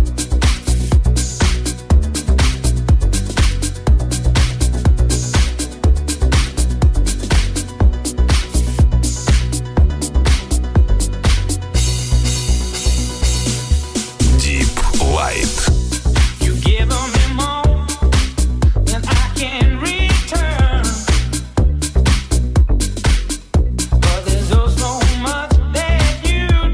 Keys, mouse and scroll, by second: 7.5 ctrl+z, 12.3 Tab, 12.9 ctrl+a, 13.2 Tab, 26.6 click.